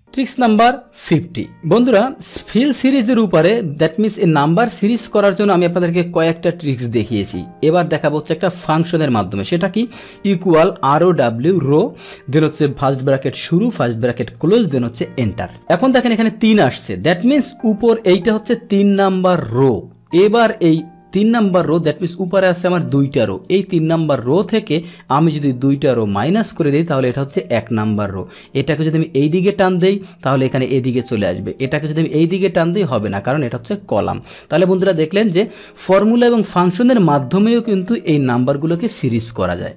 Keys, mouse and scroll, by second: 0.0 click, 3.7-4.8 drag, 8.0 click, 11.7 Tab, 15.2 Return, 16.9 click, 21.4 click, 22.1 click, 22.8 click, 23.3 click, 24.2 click, 26.0 Return, 27.4 click, 28.3 click, 31.0 click, 31.6 click, 34.5 ctrl+z, 37.7-38.8 drag.